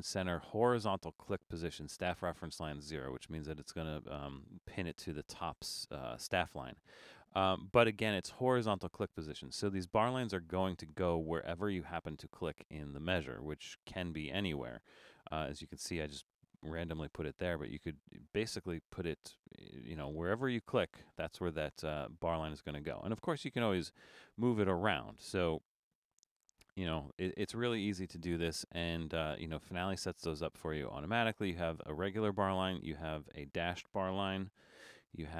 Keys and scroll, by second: 17.0 BackSpace, 29.6 BackSpace, 34.7 BackSpace.